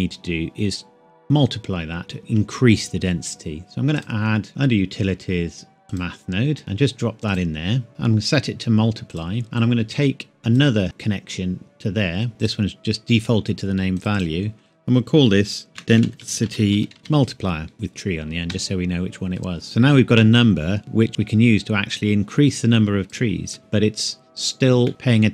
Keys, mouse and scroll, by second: 4.0 click, 5.9 click, 9.6 click, 12.4 click, 15.7-18.2 typing, 18.5 KP_Enter, 21.1-23.4 drag, 24.8 middle click.